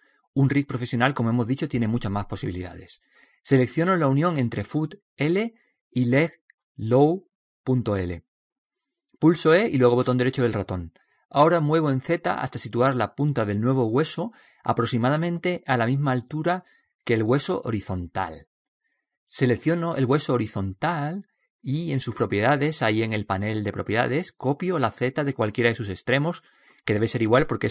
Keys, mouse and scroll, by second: 6.9 right click, 10.0 e, 12.8-14.6 drag, 20.6 right click, 25.5 ctrl+c.